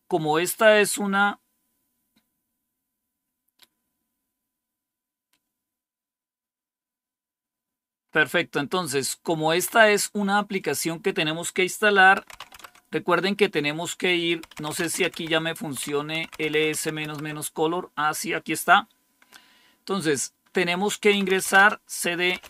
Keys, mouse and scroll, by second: 1.3-6.5 scroll down 1, 6.5-7.9 scroll down 1, 7.9-9.9 scroll up 2, 10.4 click, 11.9-12.8 typing, 14.3-17.4 typing, 20.8-22.4 typing.